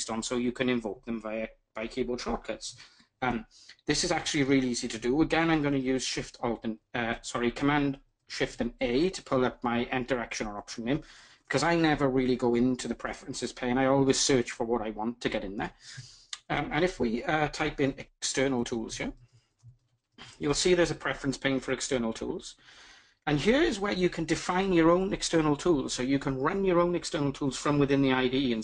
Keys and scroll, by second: 7.8 ctrl+shift+super+a.